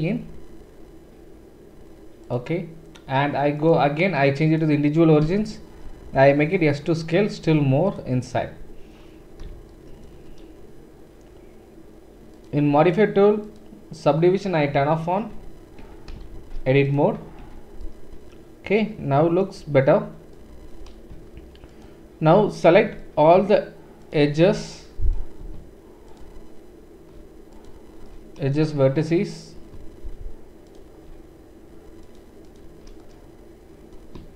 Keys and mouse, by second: 3.6-8.0 middle drag, 5.2 s, 8.0-10.1 drag, 10.1-33.9 shift+right drag, 13.4 click, 13.4 middle click, 15.3 Tab, 15.8 Tab, 16.3 shift+z, 17.4 Tab, 19.6 Tab, 26.1 alt+shift+click, 26.1 alt+shift+middle click, 33.9-34.3 shift+drag.